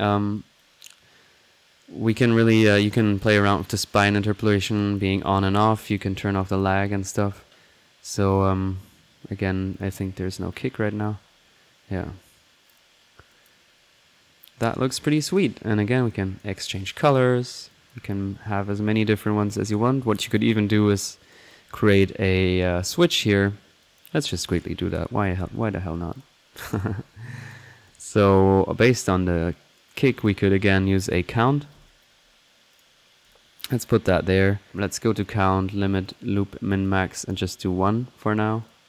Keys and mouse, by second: 0.3-0.7 drag, 0.5-0.9 typing, 0.7 click, 1.8 middle click, 2.1 click, 2.7 click, 3.5 click, 3.8 click, 4.8 click, 5.9 click, 6.3 typing, 6.4 click, 7.2 middle click, 8.1 click, 9.7 click, 10.5-10.9 drag, 10.9 middle click, 12.8 middle click, 13.3 click, 15.1 click, 16.1 click, 16.9-17.2 drag, 17.5 alt+click, 17.7 click, 18.2 click, 20.3 click, 21.5-22.1 drag, 22.2 middle click, 23.8 click, 24.5 right drag, 24.9-25.4 drag, 24.9-25.7 typing, 25.1 right click, 26.1 click, 26.7 click, 27.3 click, 28.1-28.8 typing, 28.3 click, 30.1 click, 31.1-32.2 typing, 32.7 click, 33.3 drag, 33.7 click, 34.0 middle click, 34.3 click, 35.1-35.6 drag, 36.0 click, 36.7 drag, 38.6-38.8 drag.